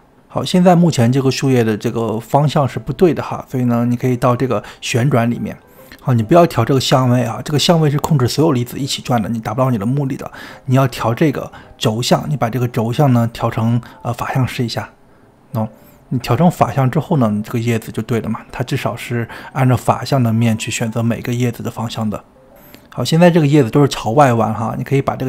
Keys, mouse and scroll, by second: 0.5 click, 2.6-5.6 drag, 6.9-9.2 drag, 9.2-13.1 middle drag, 13.1-16.8 drag, 16.8-18.9 middle drag, 18.9 click, 19.0-25.2 middle drag.